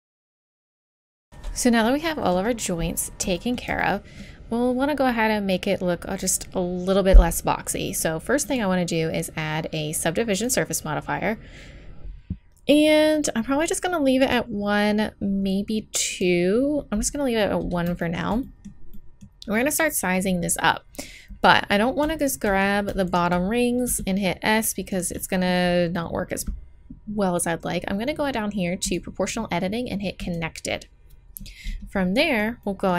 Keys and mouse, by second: 0.1 right click, 0.7 ctrl+s, 3.1 middle click, 3.8-5.7 drag, 8.5-10.4 drag, 14.3-16.1 drag, 18.0-21.7 middle drag, 22.2-23.9 drag, 23.9 s, 24.7 click, 28.9-31.7 middle drag, 32.2 middle click.